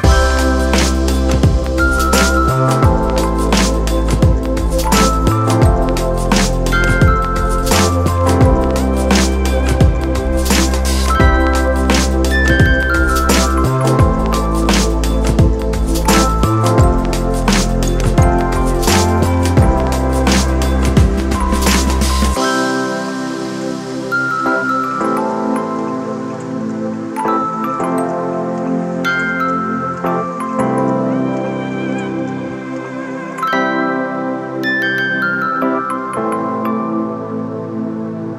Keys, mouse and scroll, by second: 6.2 ctrl+t, 17.0 ctrl+d, 27.6 alt+shift+click, 30.0 alt+shift+click, 35.0 alt+shift+click.